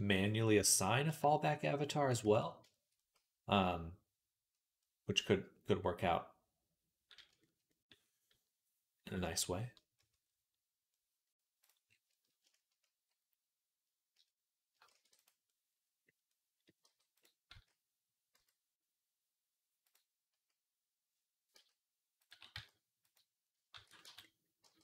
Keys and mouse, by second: 0.0 click, 0.1-1.2 drag, 1.2 shift+middle click, 2.1 ctrl+s, 2.6-6.2 shift+drag, 3.6-4.6 right drag, 7.1 shift+middle click, 8.0 middle click, 10.8 middle click, 14.8 shift+d, 15.3 click, 16.7 g, 17.4 s, 21.4 s, 22.1 s, 23.6 ctrl+a, 24.1-24.8 middle drag, 24.5 g.